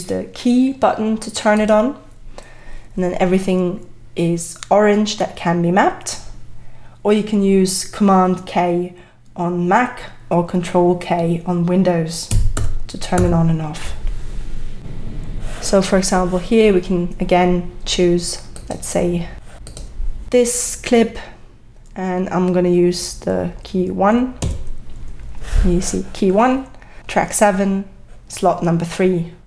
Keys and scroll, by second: 12.6 super+k.